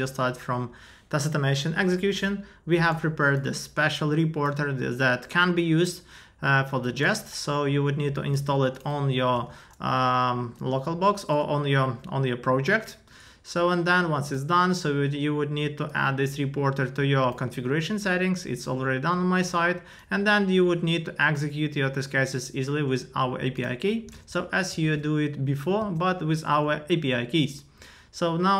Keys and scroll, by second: 8.4 super+c, 9.3 super+v, 12.6 alt+BackSpace, 24.1 super+Tab, 24.8 super+v, 25.8 Return.